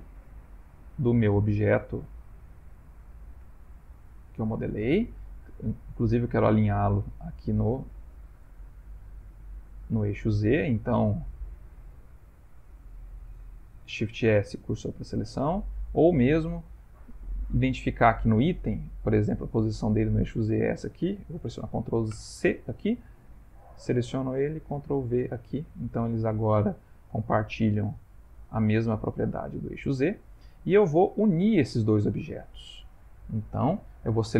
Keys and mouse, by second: 0.0 middle click, 0.2 middle click, 1.1 shift+middle click, 1.2 shift+middle click, 1.6 shift+middle click, 1.7 middle click, 2.2 middle click, 2.8 shift+middle click, 3.5 shift+middle click, 4.4 middle click, 5.3 middle click, 5.7 shift+middle click, 7.7 middle click, 11.1 click, 13.9 shift+s, 16.1 middle click, 18.2 click, 22.2 ctrl+c, 23.3 click, 24.8 ctrl+v, 25.5 middle click, 26.4 middle click, 27.0 middle click, 28.1 middle click, 30.1 shift+middle click, 30.2 shift+middle click, 30.8 middle click, 30.9 middle click, 32.0 ctrl+middle click, 33.3 middle click, 33.4 ctrl+middle click.